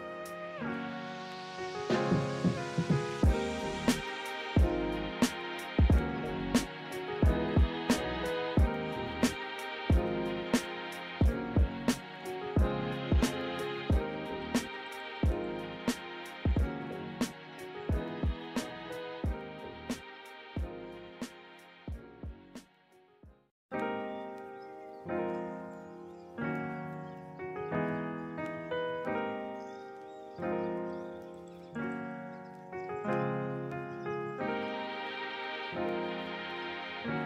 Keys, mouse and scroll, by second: 0.6 right click, 3.7 ctrl+z, 8.5 ctrl+z, 12.8 ctrl+z, 18.8 ctrl+-, 19.3 ctrl+=, 19.5 ctrl+-, 19.7 ctrl+=, 22.0 ctrl+z.